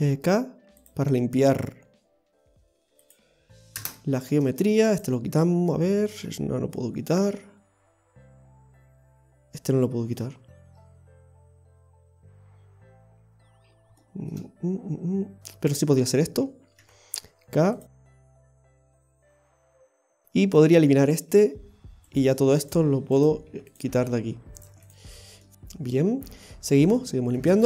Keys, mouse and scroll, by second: 4.4-4.9 scroll down 1, 4.9 right click, 6.9-7.5 scroll up 2, 13.7 scroll down 1, 14.0 shift+middle click, 18.7 k, 22.1 right click, 22.3 x, 23.1 right click, 23.4 x, 24.6 right click, 24.7 x, 25.4 middle click, 27.0 shift+middle click, 27.6 middle click.